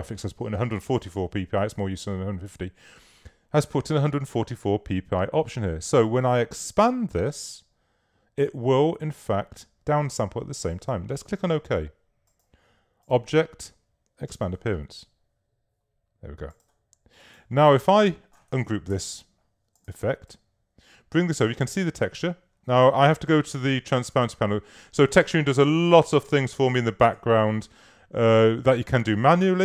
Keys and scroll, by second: 19.0 shift+super+g.